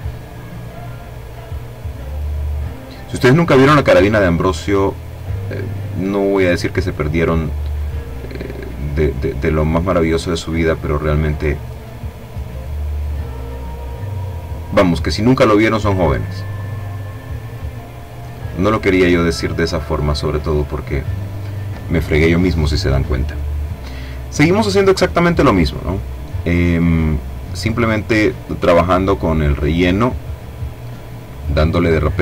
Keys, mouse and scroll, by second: 0.1 click, 0.9 click, 1.8 click, 3.1 click, 4.6 click, 5.6 click, 6.6 click, 7.4 click, 8.4 click, 9.9 click, 10.6 click, 11.3-12.4 drag, 12.6 click, 13.5 click, 15.5 click, 17.1 click, 18.0 click, 19.4 click, 22.3 click, 25.6-27.7 drag, 28.3 click, 30.0-32.2 drag.